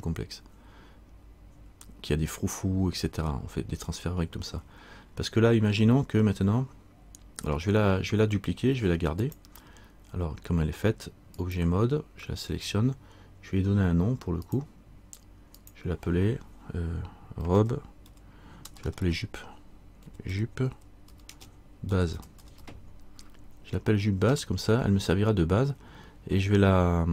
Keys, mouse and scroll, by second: 5.2-5.6 scroll up 1, 6.5-6.8 scroll down 1, 9.4 click, 14.6 click, 19.0 BackSpace.